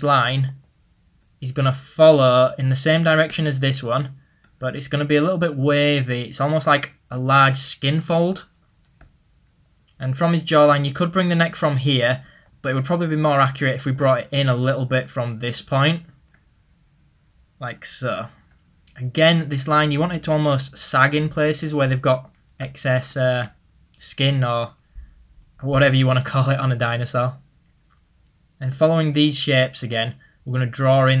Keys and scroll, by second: 0.0 ctrl+z, 3.4 ctrl+z, 9.8 ctrl+z, 12.0 ctrl+z, 13.4 ctrl+z, 29.4 ctrl+z.